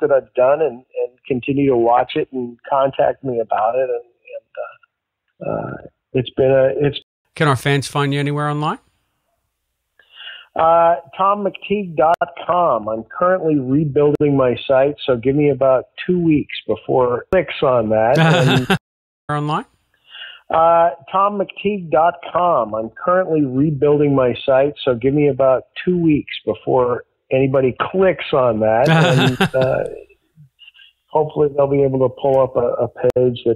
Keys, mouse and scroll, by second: 3.1 click, 6.9 space, 7.1 click, 7.1 space, 8.4 click, 10.4-11.8 drag, 12.1 Delete, 13.0 click, 14.1 Delete, 14.6 click, 15.6-16.9 drag, 18.0 click, 18.7 space, 19.1 click, 19.2 space, 20.1 click, 20.6 click, 21.7 click, 22.1 click, 23.1 click, 23.9 ctrl+s, 25.2 click, 27.1 click, 28.6 click, 31.7-32.7 drag.